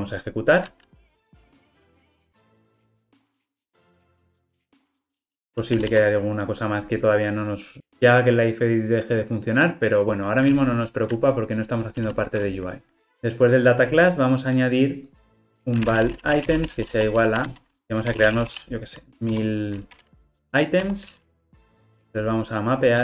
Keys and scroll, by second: 0.1 ctrl+r.